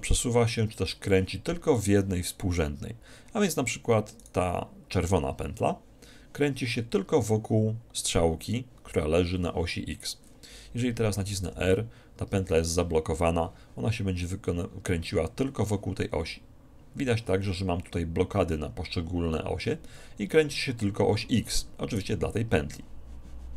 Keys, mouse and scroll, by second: 1.8-3.5 right drag, 4.3-6.0 right drag, 11.6 r, 22.0 r.